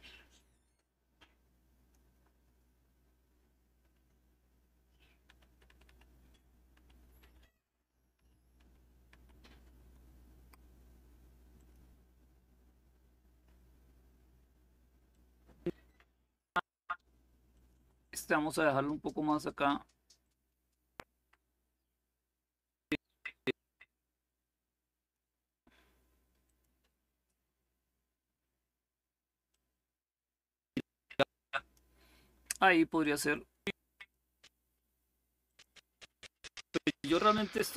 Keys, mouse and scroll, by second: 0.0-2.2 drag, 4.4 Up, 4.9 Up, 5.2 Up, 5.3 Up, 6.9 Up, 7.8 Up, 8.3 Up, 11.2 click, 14.8-16.1 drag, 17.2 click, 19.9-24.9 drag, 26.1 click, 29.2-31.5 drag, 32.7-34.4 drag, 35.1 click.